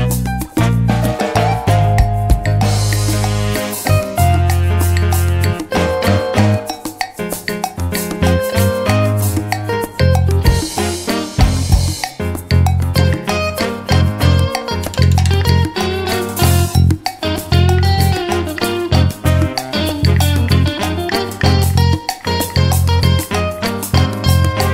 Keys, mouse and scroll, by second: 1.8 click, 2.9-4.4 drag, 4.8 click, 7.8 click, 8.5 click, 9.7 click, 10.0 click, 11.2-12.6 drag, 12.7 ctrl+z, 13.6 click, 14.6 click, 15.1 click, 15.9-17.0 drag, 17.3-18.4 drag, 19.8 click, 20.7 click.